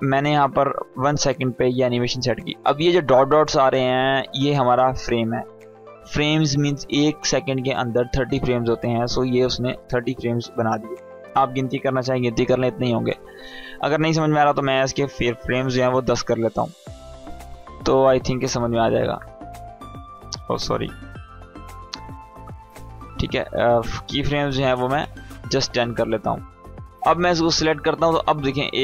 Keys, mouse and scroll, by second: 0.1-1.3 drag, 15.1 ctrl+k, 17.5 click, 20.8 ctrl+k, 23.2 click, 27.0 click.